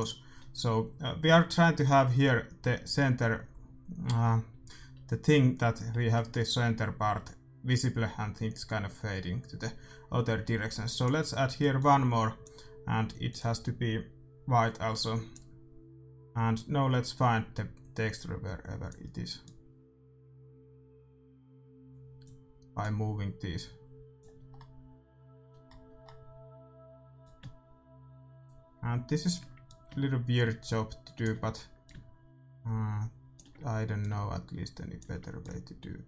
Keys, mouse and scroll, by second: 5.2-5.9 scroll up 1, 5.9-9.0 middle drag, 10.9-15.0 drag, 16.5-18.5 drag, 19.4-21.2 drag, 22.7-24.6 drag, 24.6-27.2 middle drag, 27.2-29.0 drag, 29.6-31.6 drag, 32.0-33.8 drag, 33.9-36.0 drag.